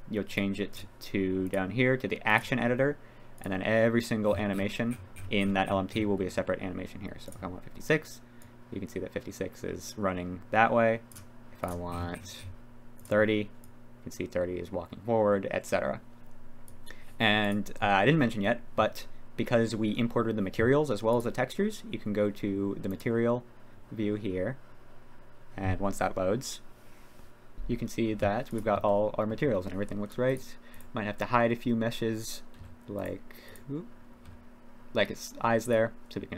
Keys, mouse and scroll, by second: 2.3 click, 8.4-10.2 drag, 10.3 click, 10.7 click, 13.6-16.8 drag, 17.4 click, 21.2 click, 22.9-27.5 drag, 28.5 click, 28.8-29.3 middle drag, 30.3 click, 32.6 g, 33.0 drag, 33.5-34.3 drag, 34.3 h, 35.8 click.